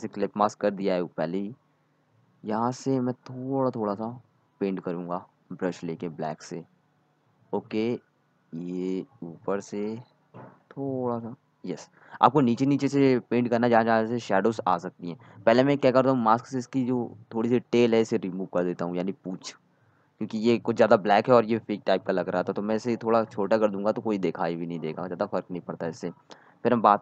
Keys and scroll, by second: 0.8-1.3 typing, 3.7 ctrl+z, 16.9 ctrl+z, 17.2 x.